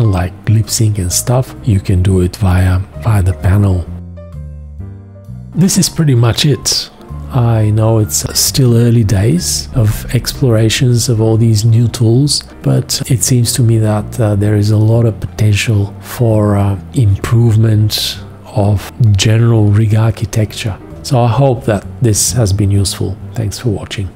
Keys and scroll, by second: 8.2 space.